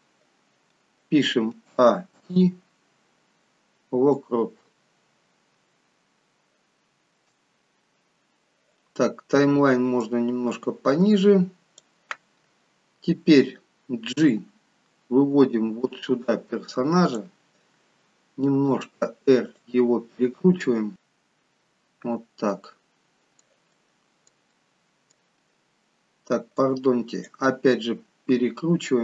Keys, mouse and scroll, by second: 2.1 a, 2.1 i, 6.0-7.2 scroll down 1, 7.2 shift+middle click, 10.0 click, 14.1 g, 18.6 r, 21.6-22.1 scroll up 3, 22.6 middle click, 22.6 scroll up 2, 24.1 middle click, 24.6 middle click, 26.6 click, 27.9-28.7 scroll up 5, 28.9-29.0 scroll up 8.